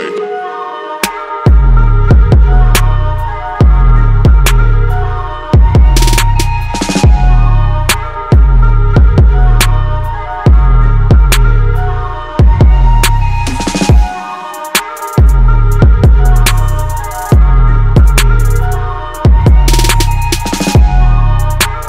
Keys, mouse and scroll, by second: 1.4-2.1 drag, 2.4 click, 3.9 click, 5.4-6.9 drag, 7.3 click, 8.0 ctrl+s, 9.0 click, 9.5 click, 9.7-11.2 drag, 11.3 alt+drag, 13.3 shift+r, 13.5 shift+r, 15.7 shift+e, 16.5 shift+r, 18.5-19.8 drag, 20.1 click, 21.3-21.8 alt+drag.